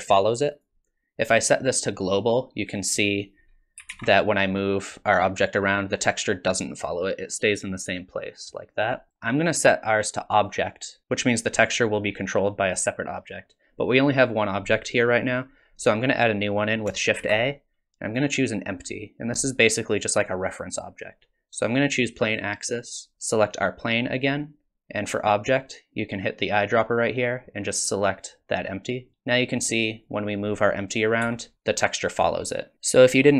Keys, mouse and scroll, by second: 1.3 click, 3.8 g, 9.1 click, 17.2 shift+a, 23.6 click, 29.7 click, 31.2 g.